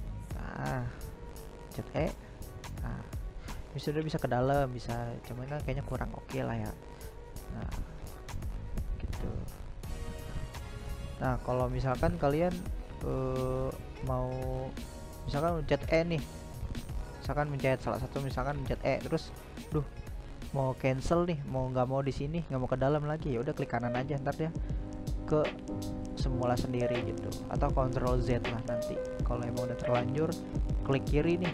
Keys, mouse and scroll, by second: 0.1 e, 3.7-7.5 middle drag, 7.5-8.9 right drag, 8.9-9.9 middle drag, 9.9 right click, 10.3-12.1 middle drag, 12.1 e, 13.7-15.0 middle drag, 15.0 e, 21.1 right click, 23.0 right click, 23.3 right click, 23.9 right click, 24.5-26.7 middle drag, 26.7 e, 28.8 ctrl+z, 29.6-31.5 middle drag.